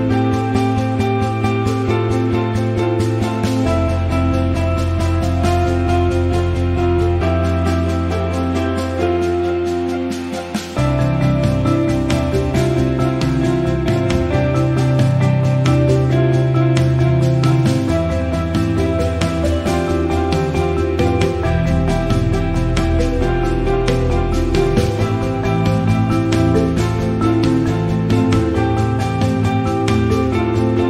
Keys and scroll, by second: 12.4 Up, 12.5 Up, 13.3 Up, 13.9 Left, 15.8 ctrl+KP_0.